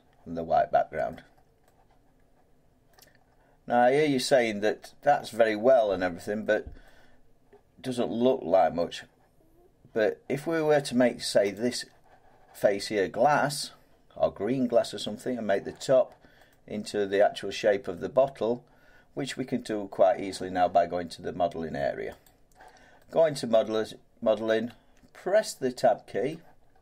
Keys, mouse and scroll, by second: 1.1 middle click, 1.3 scroll, 1.4 scroll down 5, 3.2-7.2 middle drag, 3.2-3.8 scroll down 2, 7.2-7.8 scroll down 3, 7.8 middle click, 7.8-8.2 scroll down 1, 8.2 scroll up 1, 8.3-8.8 scroll down 1, 8.8 middle click, 11.5 click, 14.7 middle click, 14.9 scroll down 1, 15.5 middle click, 16.5 scroll down 1, 17.9 middle click, 20.7-21.5 scroll, 22.2 click, 23.5-24.7 scroll, 24.7 Tab, 26.3 middle click, 26.6 middle click, 26.7 middle click.